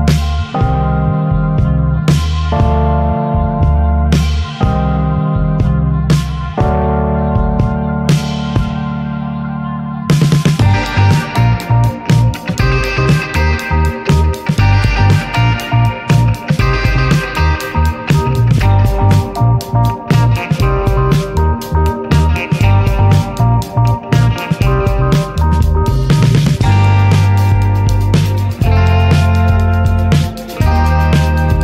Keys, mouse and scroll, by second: 1.4 alt+z, 1.6 alt+z, 1.8-2.4 scroll down 6, 2.0-2.4 shift+middle drag, 2.5 middle click, 2.8 alt+z, 3.0 scroll up 3, 3.2-4.2 shift+middle drag, 4.2 s, 6.3 middle click, 6.6 alt+s, 9.6 scroll down 2, 9.8-10.8 middle drag, 10.8-11.1 scroll up 1, 11.1-11.6 middle drag, 11.6 alt+s, 14.3 Tab, 14.5 click, 14.9 alt+middle click, 15.2 Tab, 15.7 alt+z, 16.0 shift+middle click, 16.8 scroll down 2, 17.0 shift+middle drag, 17.3 scroll up 4, 17.6 shift+middle click, 18.4 click, 21.0 scroll down 3, 21.1 alt+z, 21.4 Tab, 21.5 drag, 21.8-22.1 shift+middle drag, 22.1 Tab, 22.4 alt+z, 22.6-23.0 scroll up 2, 22.7 shift+middle click, 23.0 click, 23.5 s, 24.8 alt+z, 25.4 middle click, 25.5-26.1 scroll up 4, 25.8 shift+middle click, 26.4-28.1 right drag, 28.1 scroll down 2, 28.4 shift+middle click, 29.3 alt+shift+click, 30.2 right click, 30.4 drag, 31.1 alt+shift+drag.